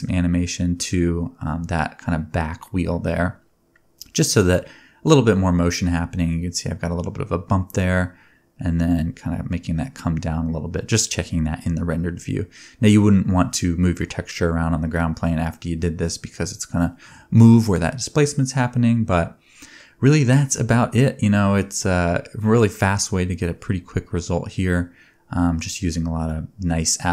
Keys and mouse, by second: 2.9-3.5 middle drag, 2.9-3.5 right drag, 6.5 shift+middle click, 6.9 space, 7.6 click, 7.6 middle click, 7.6 right click, 9.1 space, 12.0 space, 17.0 space, 17.8 ctrl+s, 19.1-21.2 drag, 20.9 ctrl+Tab, 21.6 ctrl+s, 24.2 ctrl+s, 25.7-27.1 shift+drag.